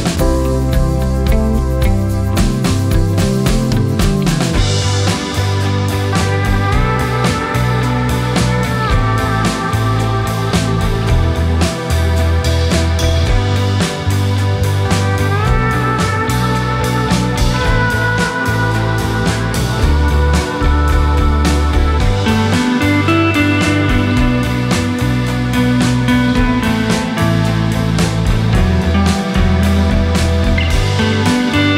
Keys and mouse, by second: 1.6 typing, 3.7 click, 4.8 click, 5.4 click, 9.4 click, 10.7 Tab, 11.8-12.7 drag, 13.9-15.9 drag, 17.4 click, 19.4-20.5 drag, 20.9 space, 23.7 space, 25.3 click, 26.9 click, 29.2 Tab.